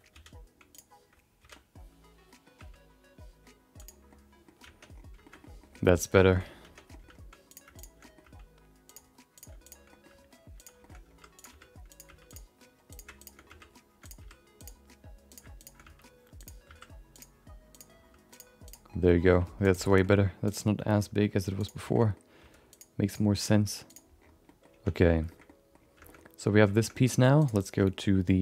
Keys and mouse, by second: 0.1 alt+z, 0.7 click, 1.4 alt+z, 1.5 middle click, 2.5 g, 4.1 middle click, 4.9 Tab, 5.2 shift+middle click, 5.4 middle click, 6.1 shift+middle click, 6.6 Tab, 6.9 middle click, 7.5 click, 7.7 shift+click, 8.0 middle click, 8.2 g, 9.3 click, 9.6 shift+click, 9.9 middle click, 10.0 g, 11.0 g, 11.5 r, 12.0 g, 12.9 click, 13.2 shift+click, 13.4 g, 14.2 r, 15.3 click, 15.6 shift+click, 15.8 g, 16.6 s, 17.7 click, 17.9 g, 18.6 click, 18.9 middle click, 19.2 g, 19.8 shift+middle click, 20.0 middle click, 20.4 click, 20.8 middle click, 21.0 g, 21.8 shift+middle click, 22.0 middle click, 22.4 r, 23.0 click, 23.3 middle click, 23.5 g, 24.4 middle click, 24.9 Tab, 25.3 shift+middle click, 25.4 middle click, 26.0 shift+middle click, 26.2 middle click, 26.7 shift+middle click, 26.9 middle click, 27.4 click.